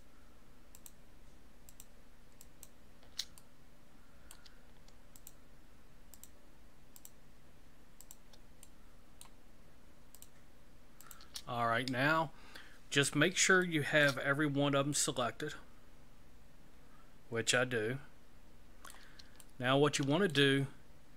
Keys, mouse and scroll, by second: 0.7 shift+right click, 1.7 shift+right click, 2.4 shift+right click, 3.4 middle click, 5.1 shift+right click, 6.1 shift+right click, 6.9 shift+right click, 8.0 shift+right click, 8.6 shift+middle click, 10.1 shift+right click, 11.0 shift+right click, 13.6 shift+middle click, 14.4 scroll down 1, 14.9 middle click, 19.4 shift+middle click.